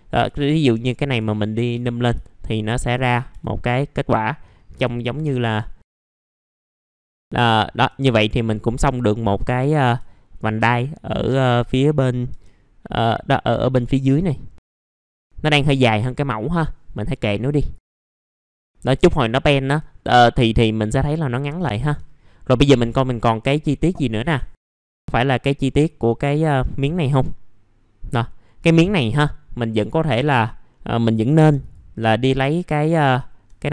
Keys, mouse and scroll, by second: 0.8 middle click, 1.3 alt+middle click, 1.7 F4, 2.0 scroll down 1, 2.2 alt+middle click, 3.6-4.7 scroll down 1, 5.7 middle click, 6.1 scroll up 1, 6.4 click, 6.5-7.0 scroll down 2, 6.7 middle click, 7.0 scroll up 1, 7.1 click, 7.4 alt+middle click, 8.1 right click, 9.3 click, 10.0-10.4 scroll down 1, 11.1-11.5 scroll up 1, 11.5 middle click, 11.6-12.0 scroll down 1, 12.0 scroll up 1, 12.9-14.8 drag, 14.8 w, 15.1 click, 17.8 click, 17.8 scroll up 1, 17.9 F4, 18.1 middle click, 18.4 F4, 18.5 scroll down 1, 18.7 alt+middle click, 19.5 alt+middle click, 20.5 click, 21.6 f, 22.0-22.4 scroll down 1, 22.4-23.1 scroll up 1, 23.1 middle click, 24.7 scroll down 1, 24.9 middle click, 25.2-26.2 scroll up 1, 28.7 middle click, 29.8 click, 30.0 F4, 30.7 middle click, 31.6 click, 33.1-33.7 scroll up 2.